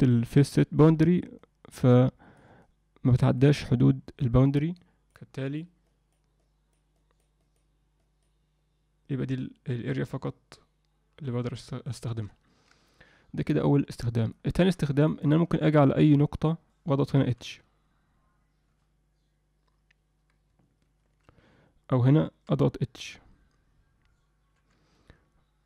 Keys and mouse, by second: 1.4-2.4 drag, 2.6 click, 3.6 click, 4.8 click, 5.3 click, 5.8 click, 6.4 click, 7.0 click, 7.4 click, 8.0 click, 14.3 alt+shift+middle click, 15.0 ctrl+alt+middle click, 17.3 h, 21.0 ctrl+z, 22.5 h.